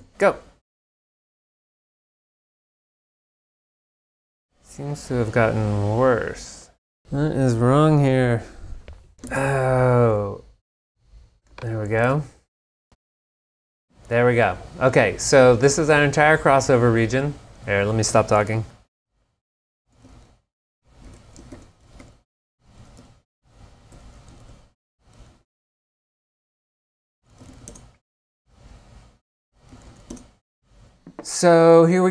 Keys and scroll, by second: 0.0 g, 9.3 super+Tab, 12.1 super+Tab, 19.5-25.9 typing, 27.5 shift+m, 27.7 shift+Return, 28.7 Return, 29.5-30.5 typing.